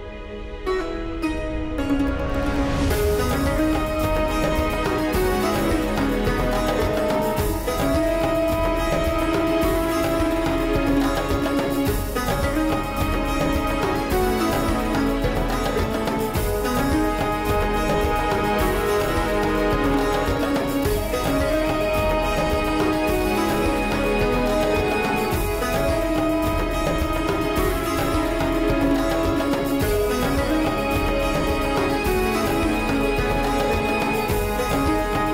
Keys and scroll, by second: 1.0 Tab, 2.5 Tab, 5.9 shift+d, 6.9 Escape, 7.3 p, 8.0 Tab, 9.9 Tab, 12.7 f, 13.6 1, 16.3 ctrl+x, 19.4 2, 20.5 shift+s, 21.4 Tab, 28.9 r, 30.7 r, 34.0 Tab, 34.8 3.